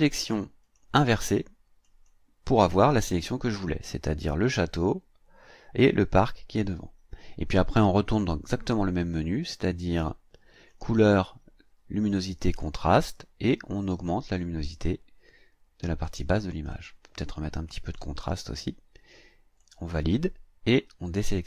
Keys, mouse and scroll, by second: 0.6 click, 1.8 click, 10.7 click, 12.5 click, 14.2-16.2 drag, 16.7-18.1 drag, 19.6 click.